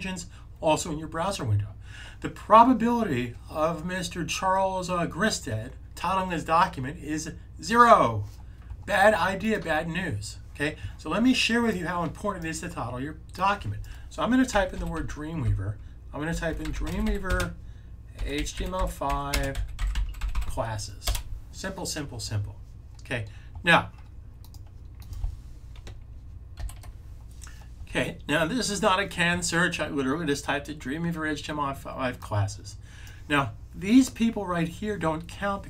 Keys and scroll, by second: 14.2-20.7 typing.